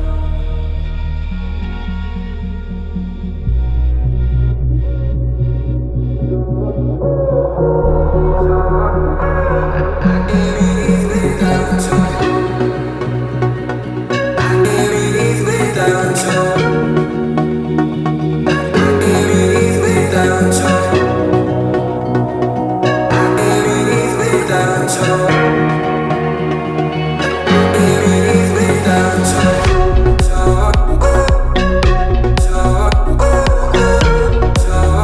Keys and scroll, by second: 3.2 Left, 6.5 h, 9.1 space, 12.0 m, 14.1 Left, 14.6 Right, 25.0 t, 29.9 m, 31.6 Left, 31.8 Right, 34.4 space.